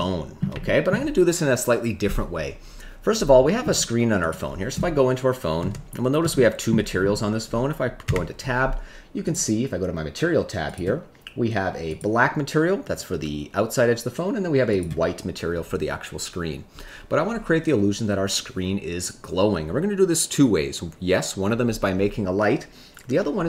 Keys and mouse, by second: 0.6 shift+middle click, 6.3 shift+middle click, 8.0 Tab, 9.2 click, 11.8 click, 14.7 click.